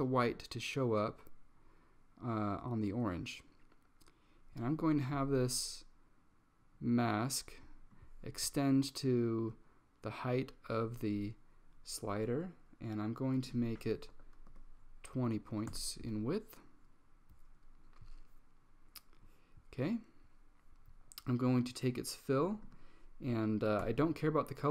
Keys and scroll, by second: 14.0-15.1 typing, 15.8 Return, 23.9 typing.